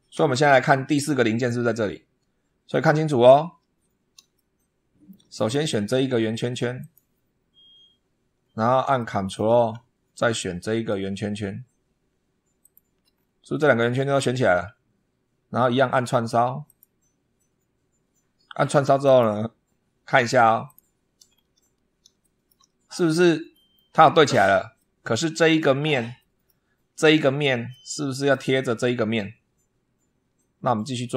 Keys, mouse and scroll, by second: 0.0 super+2, 2.5 scroll up 2, 3.1 scroll down 2, 4.2-5.1 shift+middle drag, 5.5 scroll up 1, 6.6 click, 8.3 scroll down 1, 8.8 shift+middle click, 10.7-11.1 ctrl+scroll up 1, 12.5 ctrl+click, 13.0 ctrl+scroll down 2, 13.8 scroll down 2, 14.3 scroll down 2, 15.3 scroll up 2, 16.5 click, 18.9 click, 20.5 click, 21.1 scroll down 1, 22.1 shift+click, 22.6 shift+scroll up 1, 23.4 shift+click, 24.6-25.6 drag, 26.0-26.5 middle drag, 27.5-28.3 middle drag.